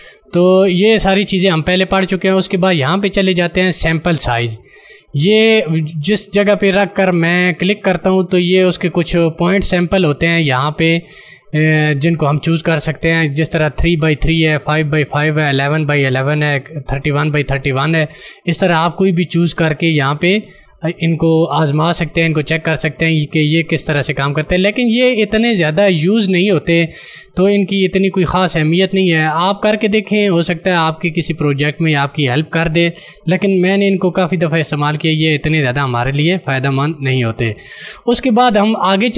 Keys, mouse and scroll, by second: 12.3 click, 19.6 click, 27.7 click, 34.4 ctrl+d, 37.0 ctrl+d.